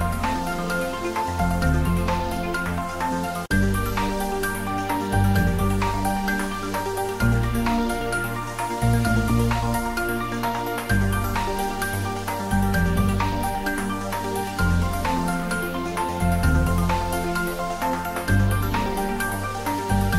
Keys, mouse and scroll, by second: 0.4 ctrl+s, 1.1 click, 2.4 ctrl+s, 2.8 click, 3.3 ctrl+middle click, 4.1 ctrl+shift+middle click, 4.3 shift+a, 4.7 click, 4.9 b, 5.6 click, 7.3 click, 7.8 ctrl+middle click, 8.1 middle click, 8.9 shift+a, 9.4 click, 9.8 n, 10.3 click, 11.2 ctrl+middle click, 12.2-13.4 drag, 13.4 ctrl+middle click, 13.9 click, 14.9 ctrl+t, 15.7 ctrl+shift+middle click, 17.3-18.2 drag, 19.4 ctrl+middle click.